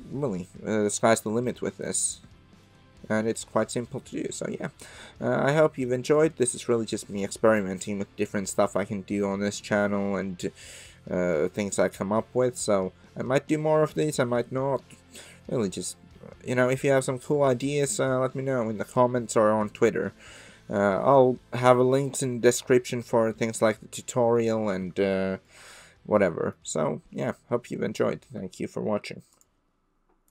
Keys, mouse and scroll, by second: 1.1 middle click, 2.6-5.6 middle drag, 6.1-7.3 middle drag, 9.2-18.0 middle drag, 18.5-19.4 middle drag, 19.5-24.4 middle drag, 25.1-25.5 shift+middle drag, 25.8-26.5 middle drag.